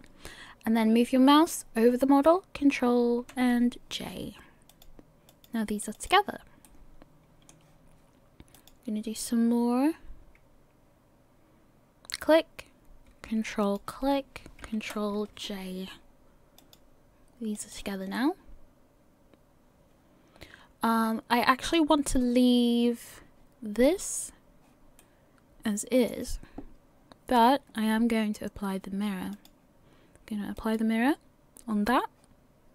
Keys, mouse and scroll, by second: 4.7 click, 5.3 click, 6.6 middle click, 8.5 click, 13.6 ctrl+click, 14.9 ctrl+j, 16.6 click, 17.6 click, 18.1 middle click, 23.2-23.8 scroll down 1, 23.8 click, 25.0 middle click, 29.3 click.